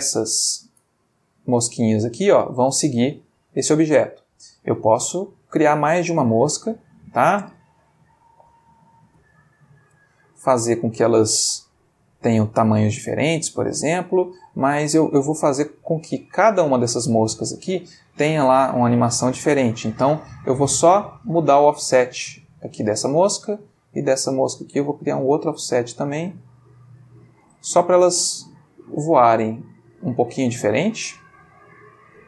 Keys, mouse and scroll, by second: 0.3-0.8 ctrl+shift+middle drag, 1.0-2.0 ctrl+shift+middle drag, 2.7-3.5 ctrl+middle drag, 3.7-4.2 ctrl+middle drag, 4.3 ctrl+middle click, 5.0-6.4 ctrl+shift+middle drag, 6.7 ctrl+click, 8.1 shift+d, 8.9 shift+click, 9.2 shift+d, 10.0 click, 10.7 click, 13.8-14.8 ctrl+middle drag, 16.7-18.1 drag, 19.2 click, 21.2-23.1 drag, 23.8 click, 24.7-27.5 drag, 27.7 space, 31.5 Escape.